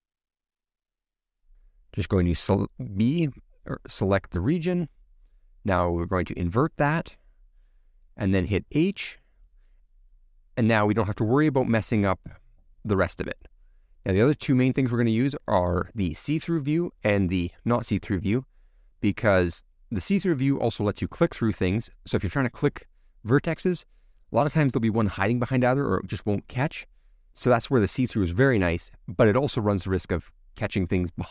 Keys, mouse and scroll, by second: 7.7-9.3 drag, 9.3 h, 10.4-13.0 middle drag, 13.0 click, 13.9-16.3 middle drag, 16.3 a, 16.5-17.7 middle drag, 17.7-18.0 a, 18.6 shift+middle click, 19.6-20.3 scroll up 5, 20.3 middle click, 21.3-22.4 scroll down 2, 22.4 click, 22.8-26.0 middle drag, 26.0-26.9 scroll up 2, 26.9-27.4 scroll down 1, 27.4-28.5 middle drag, 28.5-29.3 scroll up 1, 29.3-31.0 scroll up 1, 31.0-31.3 drag.